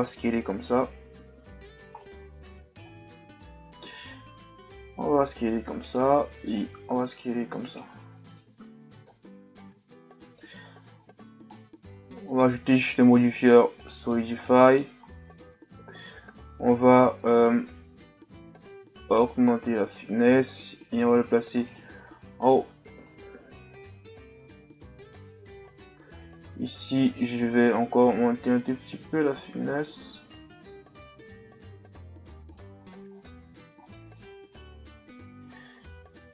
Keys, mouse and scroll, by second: 2.0-4.1 middle drag, 4.1 s, 6.6-8.0 drag, 8.0-9.0 middle drag, 9.0 KP_1, 9.9 scroll up 1, 10.2 Tab, 11.0-12.2 shift+scroll down 5, 13.9-14.4 drag, 14.4-17.4 middle drag, 17.4-20.5 drag, 21.7-23.0 drag, 24.1-24.9 scroll up 6, 24.9-26.9 middle drag, 26.9-31.1 drag, 33.1-33.5 shift+scroll up 2, 33.8-34.4 middle drag, 34.4 Tab, 35.8 s.